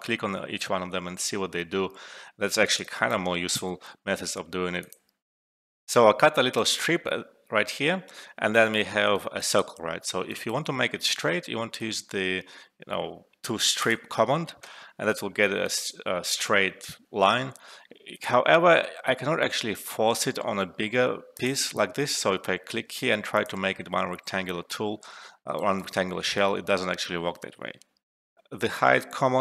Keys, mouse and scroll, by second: 1.8 ctrl+z, 1.9 alt+middle click, 2.8 alt+right click, 3.2 alt+middle click, 4.7 click, 4.8 click, 6.5-8.5 alt+right drag, 8.7 alt+middle click, 9.1 alt+right click, 9.7 alt+middle click, 10.2 alt+right click, 10.5 alt+middle click, 11.0 alt+right click, 13.7 click, 15.2 alt+middle click, 15.6 alt+right click, 17.6 alt+middle click, 18.0 click, 21.3 click, 22.4 alt+middle click, 23.3 click, 25.2 alt+middle click, 25.5 alt+right click, 28.2 alt+F12.